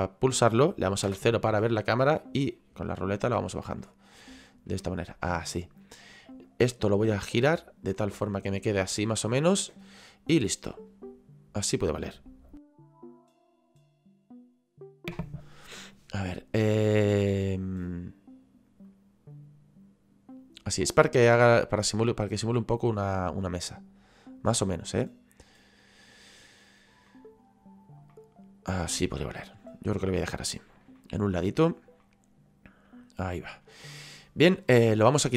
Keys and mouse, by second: 1.1 KP_0, 3.8 middle click, 4.8 middle click, 6.5 right click, 7.4 click, 10.4 click, 17.1 middle click, 18.8 click, 21.9 click, 23.7 click, 27.1 middle click, 28.1 middle click, 31.0 shift+middle click, 32.0 middle click.